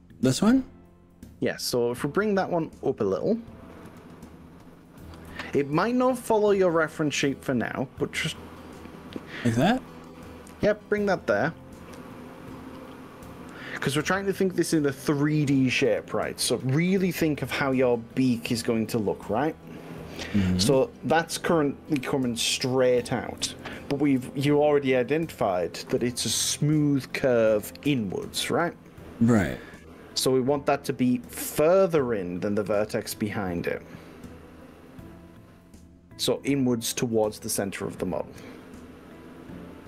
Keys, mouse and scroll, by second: 0.4-2.9 middle drag, 2.9 click, 3.9 KP_3, 5.3 g, 11.9 click, 15.5-19.0 middle drag, 19.6 click, 20.3-21.3 middle drag, 22.0 KP_3, 23.5 g, 27.3 click, 28.0-36.2 middle drag, 36.9 middle click, 37.9-39.2 middle drag.